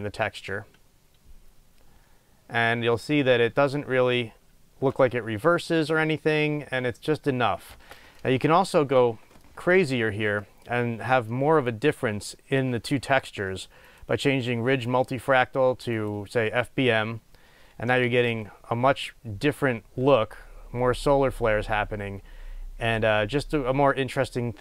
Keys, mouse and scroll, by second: 7.9 space, 8.4-9.6 middle drag, 9.6 middle click, 10.6 middle click, 11.5 middle click, 16.3-24.6 drag, 18.2 space.